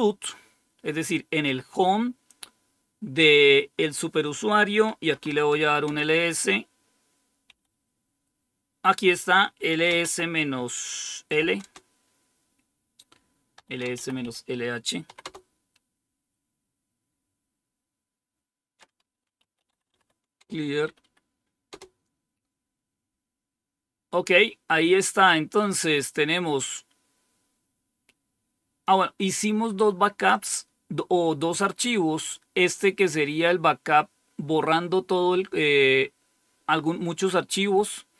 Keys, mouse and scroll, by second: 4.9-5.7 typing, 5.8 Return, 7.4 typing, 9.6-10.0 typing, 11.2-12.0 typing, 13.2-15.1 typing, 19.3-20.3 typing, 20.8 Up, 20.9 Up, 21.6 Return, 25.5-28.8 drag, 30.2-32.3 drag.